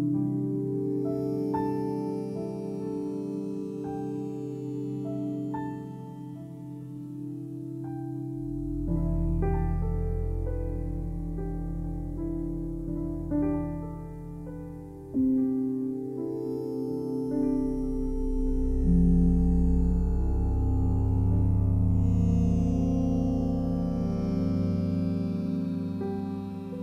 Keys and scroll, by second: 2.7 2, 4.2 1, 5.4 Return, 12.2 m.